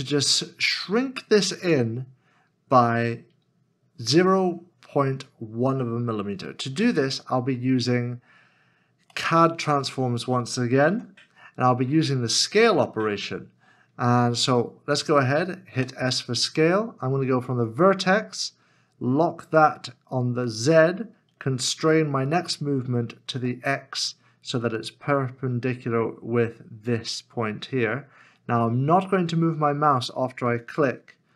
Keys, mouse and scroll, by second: 9.2 middle click, 10.0-10.5 scroll down 1, 10.9 alt+z, 11.5-11.9 scroll up 1, 15.7 s, 20.6 shift+z, 23.3 x.